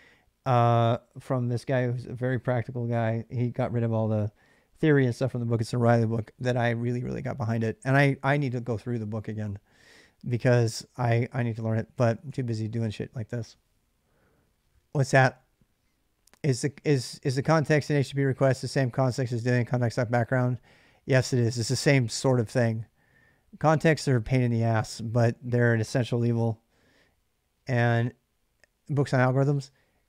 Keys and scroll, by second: 10.9-12.6 typing.